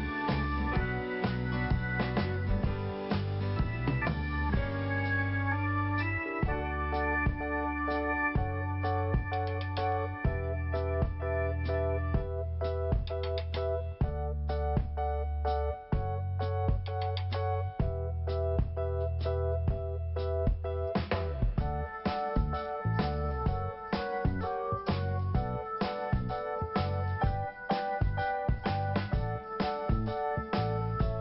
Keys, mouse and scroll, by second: 2.4 click, 4.4 click, 4.5 click, 5.3 click, 6.7 i, 7.5 scroll down 1, 9.1 scroll up 1, 10.2 5, 12.2 click, 12.3 click, 13.0 click, 13.1 click, 13.9 click, 14.0 click, 14.9 click, 15.0 click, 18.3 click, 18.4 click, 22.1 click, 22.4 click, 27.4 click, 27.6 click, 27.7 click, 28.2 click, 28.3 click.